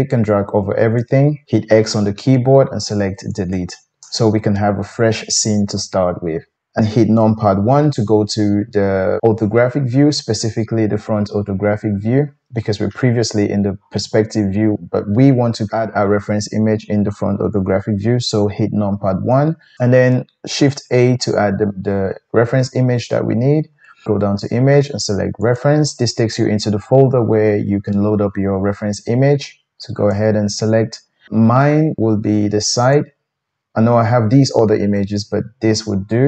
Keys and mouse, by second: 1.6 x, 3.5 typing, 7.7 KP_1, 16.6-36.2 drag, 19.3 KP_1, 20.9 shift+a.